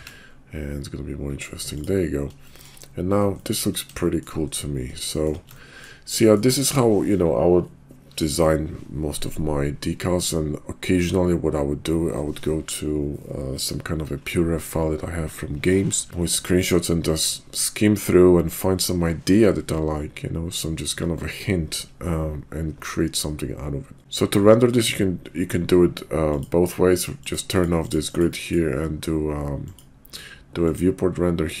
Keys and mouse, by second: 2.4 shift+drag, 3.5 shift+click, 4.0 shift+drag, 5.1 shift+click, 5.7 ctrl+click, 6.1-6.5 ctrl+drag, 26.3 click, 27.2 click, 27.5 click, 28.0 click, 28.4 click, 29.6 drag, 30.6-31.6 drag.